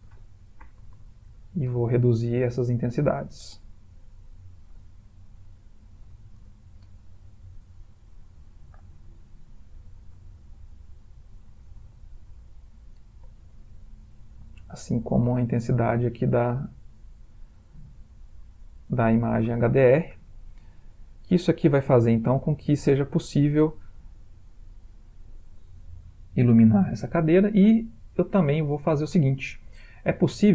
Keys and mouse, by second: 1.1 0, 2.9 click, 4.4 ctrl+click, 6.3 0, 8.0 click, 9.8 ctrl+click, 14.9 click, 15.7 click, 16.3 click, 18.8 click, 19.6 click.